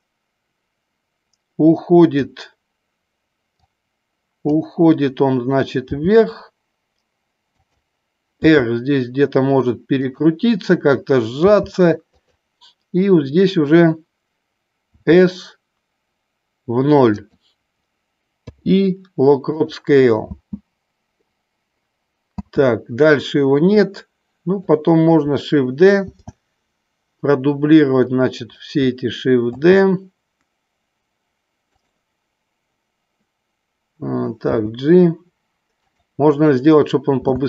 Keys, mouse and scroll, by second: 4.1 click, 5.9 g, 7.7 click, 8.7 r, 11.5 g, 14.8 s, 17.3 click, 18.4 i, 20.7 space, 22.8 space, 24.0 click, 26.2 shift+d, 28.6 click, 29.7 shift+d, 32.0 click, 34.6 g, 36.1 click, 37.3 space.